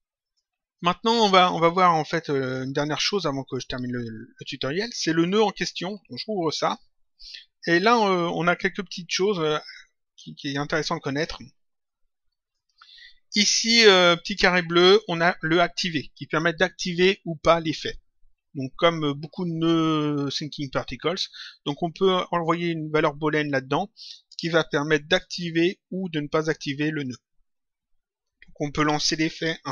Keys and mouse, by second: 0.2 click, 1.4 click, 5.9 click, 7.5 click, 9.9 click, 11.8 click, 14.2 click.